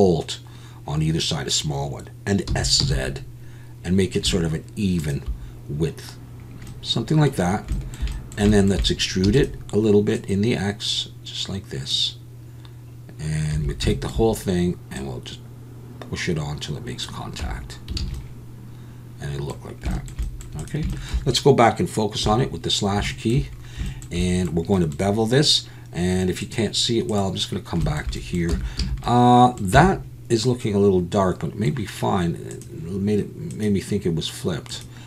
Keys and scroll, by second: 2.5 s, 2.8 z, 9.2 e, 13.5 a, 17.4 Tab, 18.0 alt+a, 28.5 Tab, 28.8 a, 29.7 Tab.